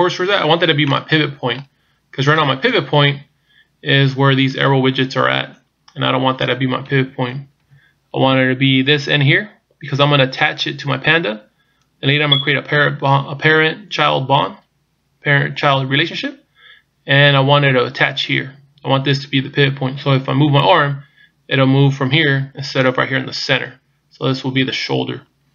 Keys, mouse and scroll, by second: 0.9 middle click, 2.7 KP_1, 6.8 KP_3, 7.6 KP_1.